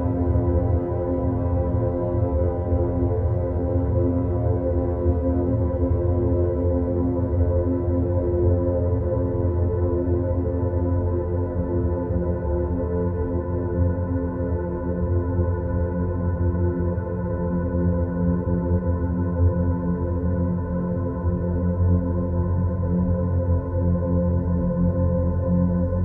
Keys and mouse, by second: 1.0-1.7 middle drag, 2.9 ctrl+r, 12.5 3, 12.9 click, 13.8 click, 14.5 e, 18.2 s, 24.4 click.